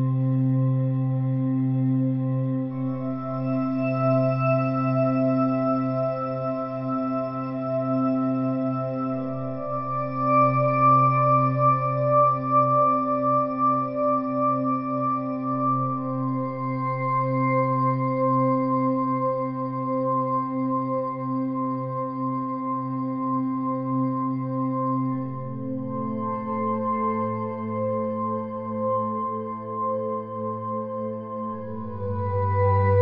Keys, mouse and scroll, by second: 0.2 a, 0.3 a, 0.8-1.8 drag, 2.5 ctrl+r, 3.0 click, 3.6 Tab, 3.9 Tab, 4.0 click, 4.6 Tab, 5.9 ctrl+alt+click, 7.0 middle click, 8.4 click, 9.1 Tab, 9.4 middle click, 9.8 ctrl+z, 10.0 ctrl+z, 10.2 middle click, 11.0 ctrl+z, 11.3 ctrl+z, 11.8 ctrl+z, 12.0 ctrl+z, 12.1 ctrl+z, 12.3-13.0 ctrl+z, 13.1 ctrl+z, 13.4 ctrl+z, 13.6 ctrl+z, 13.7 ctrl+z, 13.9 ctrl+z, 14.4 a, 14.6 Tab, 16.0 ctrl+alt+click, 16.5 click, 17.3 KP_1, 17.6-19.0 middle drag, 19.0 click, 19.6 click, 20.0 KP_7, 20.5 click, 21.3 KP_1, 21.7 click, 22.6 click, 23.2-25.0 middle drag, 24.1 Tab, 25.8 click, 26.5 middle click, 26.6 click, 26.9 s, 28.5 Tab, 28.8 click, 30.0 g, 31.0 middle click, 32.4 Tab, 32.7 x.